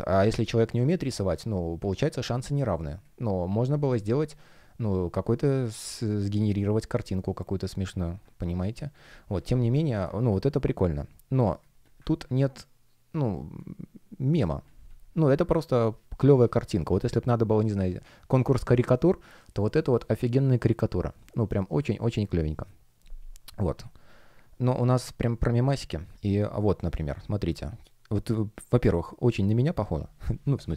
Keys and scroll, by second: 0.6 space, 8.1 super+space, 11.3 space, 13.3 space, 25.4 space.